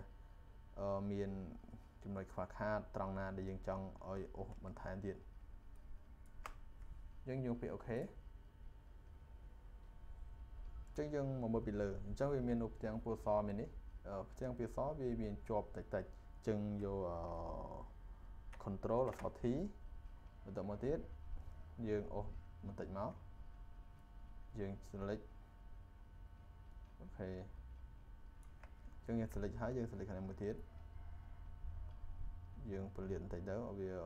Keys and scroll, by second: 19.0 ctrl+t.